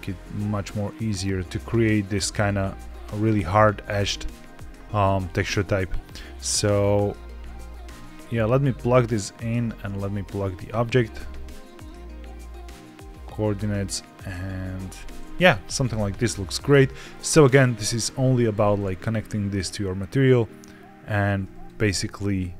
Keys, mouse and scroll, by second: 3.1-4.2 scroll up 1, 4.2 scroll down 1, 4.2 scroll down 2, 6.7 click, 9.8 click, 11.7-14.6 drag, 14.7 click, 15.3-15.7 scroll down 3, 15.7 middle click, 16.7 middle click, 18.4 ctrl+shift+click, 20.3 click, 21.5 ctrl+shift+click.